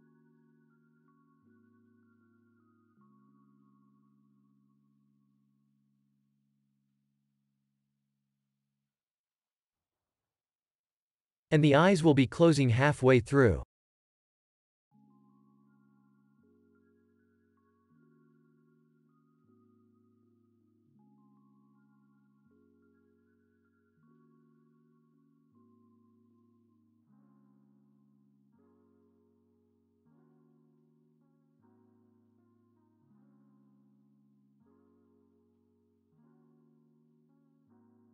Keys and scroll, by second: 0.6 ctrl+s, 2.3 F9, 7.8 ctrl+s, 16.1 ctrl+s, 24.5 ctrl+s, 25.9 ctrl+s, 29.8 9, 32.0 1, 32.8 Return.